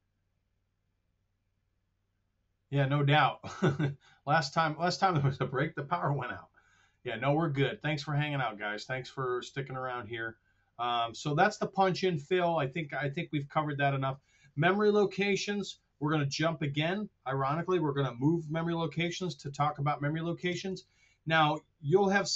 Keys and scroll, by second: 6.8 super+Tab, 19.6 super+Tab, 20.4 super+Tab.